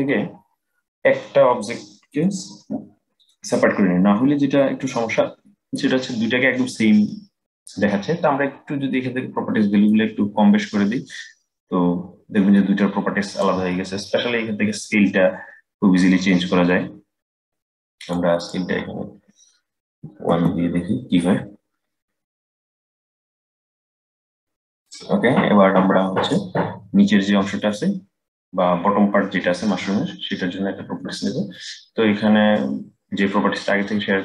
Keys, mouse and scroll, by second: 1.8-4.8 drag, 9.6-12.6 drag, 14.5-17.6 drag, 18.1-21.2 drag, 22.7-24.5 drag, 24.5-25.4 scroll down 4, 25.4-25.9 scroll down 1, 25.9 click, 32.2-34.2 middle drag.